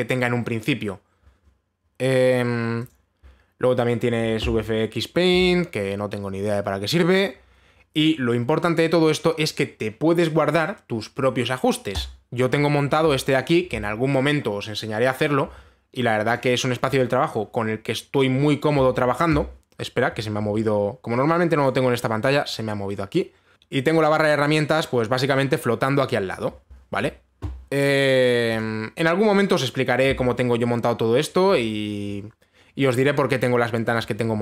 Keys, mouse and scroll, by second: 2.0-3.4 scroll, 3.4 scroll, 3.5 click, 7.6 middle click, 12.6 click, 14.0 click, 16.9 click, 23.5 click, 26.9 click, 29.2 click.